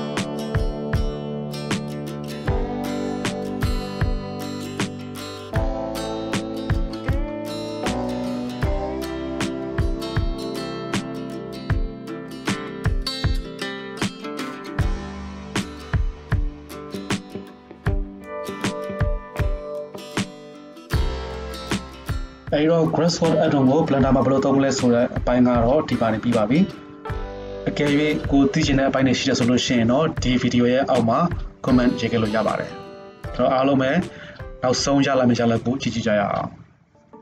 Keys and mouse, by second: 0.1-7.2 right drag, 7.2 middle click, 7.4 click, 7.6-8.9 middle drag, 7.6 KP_7, 8.9 shift+click, 9.0 KP_0, 12.8 shift+middle click, 15.0 drag, 15.1-15.5 shift+middle drag, 17.7 click, 18.3-25.0 shift+middle drag, 31.1 right click.